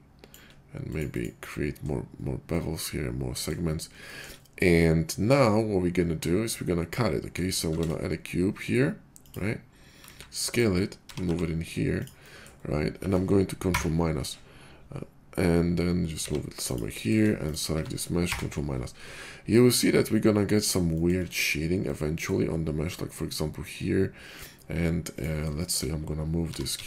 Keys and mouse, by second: 1.2-4.1 middle drag, 7.7 shift+a, 8.1-10.5 middle drag, 10.0 s, 10.5-17.2 drag, 11.0 g, 13.7 ctrl+KP_Subtract, 16.1 g, 17.7 click, 18.2 ctrl+KP_Subtract, 18.4-20.7 drag, 20.8-25.3 shift+drag, 25.7-26.8 shift+drag, 26.4 g.